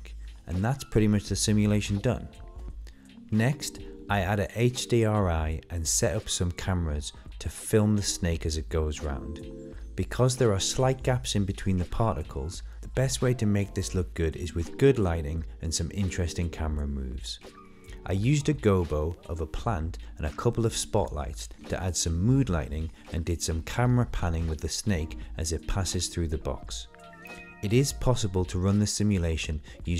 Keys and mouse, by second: 0.7 middle click, 1.5 click, 2.3 middle click, 3.1-4.8 middle drag, 5.6-6.0 drag, 6.6 click, 7.6 click, 8.4 click, 8.8-9.5 middle drag, 10.2 click, 13.8-14.9 middle drag, 15.9 click, 16.1 click, 16.8 click, 19.9 click, 21.9-23.1 middle drag, 26.0 middle click, 28.9 middle click.